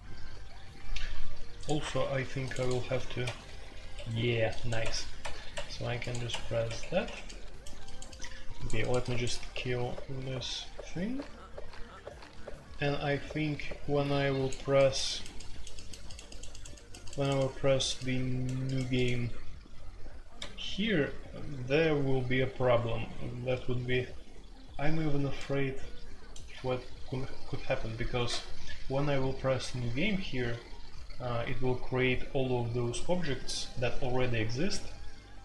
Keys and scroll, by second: 3.2 Escape, 3.9 Escape, 4.8 Escape, 5.2 Escape, 6.6 Escape, 7.0 Escape, 20.3 Escape.